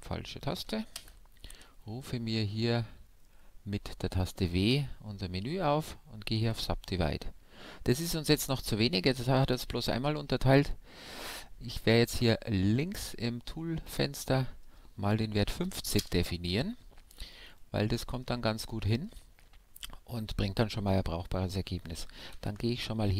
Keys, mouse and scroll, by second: 0.9 w, 13.8-15.6 drag, 17.3-22.3 middle drag, 22.3 ctrl+f.